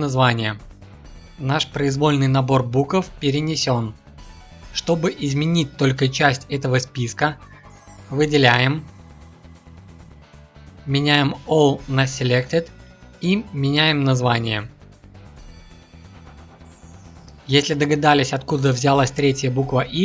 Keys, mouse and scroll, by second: 8.2 shift+click, 9.6 ctrl+F2, 15.4 BackSpace, 15.5 BackSpace.